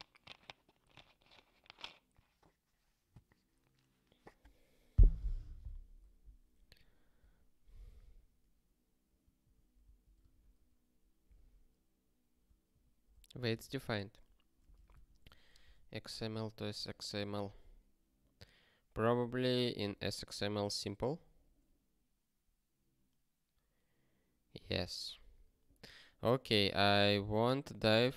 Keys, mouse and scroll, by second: 9.4 ctrl+n, 9.8 ctrl+p, 12.7 ctrl+n, 13.1 ctrl+p, 13.6 alt+<, 15.3 x, 15.6 m, 16.1 ctrl+g, 17.5 scroll down 1, 19.2 click, 20.7 alt+., 21.7 scroll down 1, 24.5-24.9 scroll down 1, 25.9 click, 27.4 scroll down 1.